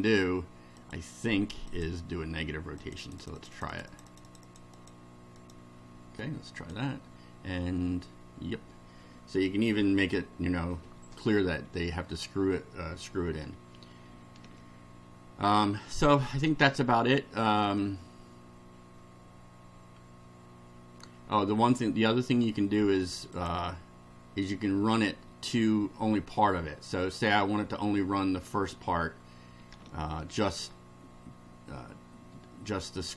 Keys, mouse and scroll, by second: 0.8 click, 1.7 click, 2.8 click, 5.4 click, 6.6 click, 11.7 scroll up 2, 12.1 scroll down 2, 13.6 scroll up 2, 14.2 shift+scroll up 2, 21.6 shift+scroll down 2, 23.3 click, 29.9 shift+middle click.